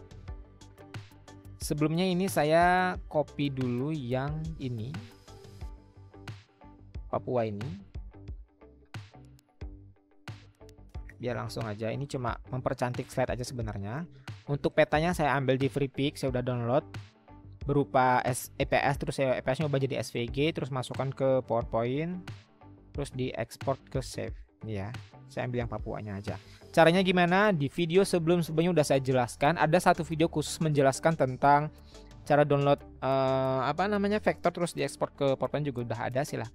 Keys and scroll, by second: 9.5 ctrl+c, 12.2 ctrl+c, 12.9 ctrl+v, 27.1 Delete.